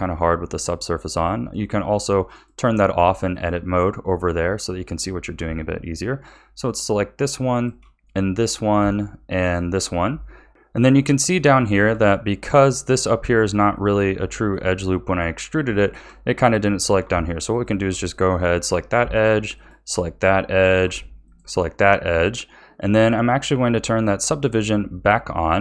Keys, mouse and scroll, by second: 1.0 click, 2.3 click, 3.3-4.5 middle drag, 4.5-6.6 scroll up 1, 6.6 alt+shift+click, 7.5 alt+shift+click, 8.0-9.4 middle drag, 9.4 alt+shift+click, 10.3 scroll down 2, 10.5-17.5 middle drag, 17.5 alt+shift+click, 18.1-19.5 middle drag, 19.5 alt+shift+click, 20.2-21.2 middle drag, 21.2 alt+shift+click, 21.8-24.8 middle drag.